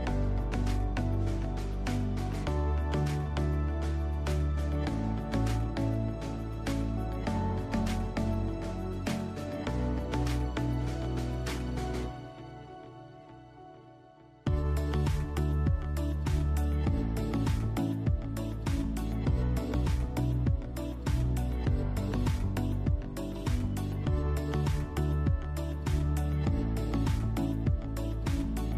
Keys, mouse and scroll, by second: 0.0 click, 0.3 e, 1.0 click, 1.5 s, 2.0 click, 2.3 e, 3.2 click, 3.5 e, 4.7 click, 5.0-7.8 shift+middle drag, 5.8 s, 7.8 click, 8.0 e, 8.9 click, 9.5 e, 10.3 click, 10.6 s, 11.8 click, 12.2 e, 13.1 click, 13.2 s, 15.0 click, 15.9 e, 17.0 click, 18.3 g, 19.5 click, 19.7 middle click, 20.2 scroll down 1, 20.7 shift+middle click, 20.9 scroll, 21.5 click, 22.0 click, 23.4 click, 23.8 shift+middle click, 24.1 shift+middle click, 24.3-25.9 middle drag, 24.3-24.6 scroll up 2, 25.2 s, 25.9 click, 27.1 g.